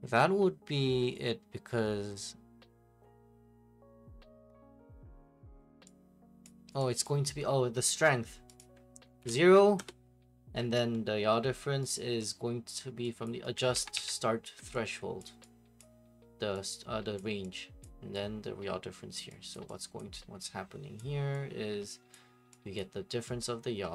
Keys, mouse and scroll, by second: 6.4 click, 7.0 click, 8.6 click, 9.3-9.8 typing, 10.8 right click, 12.0 right click, 13.2 click, 13.6 ctrl+right click, 13.7 ctrl+c, 13.9 ctrl+v, 15.2 click, 15.8 click, 17.2 click, 17.8 click, 19.1 click, 19.5 click, 20.0 click, 21.0 click, 22.1 click, 22.8 click.